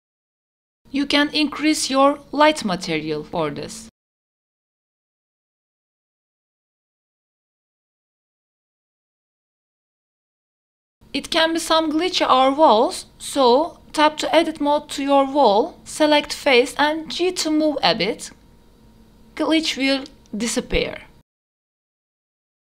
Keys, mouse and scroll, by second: 0.0 click, 1.6 click, 2.3-4.9 drag, 5.5-6.7 drag, 6.9 click, 8.4 w, 8.4 click, 8.4 e, 8.6 w, 8.6 q, 13.5 click, 14.3 Tab, 15.7 click, 17.0 g, 19.6 Tab, 20.6 a, 20.8 a, 21.4 q.